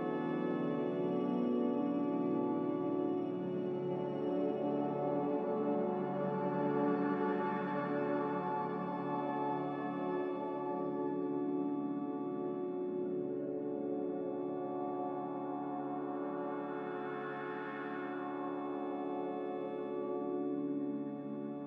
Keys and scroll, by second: 17.9 b.